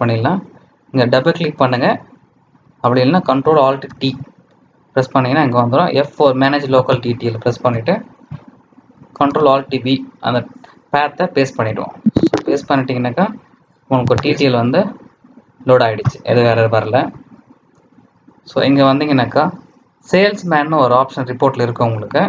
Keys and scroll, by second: 3.8 ctrl+alt+t, 9.2 ctrl+alt+v.